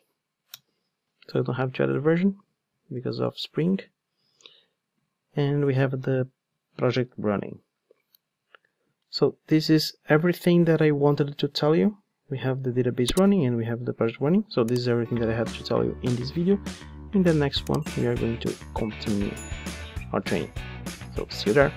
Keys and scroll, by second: 4.4 super+z.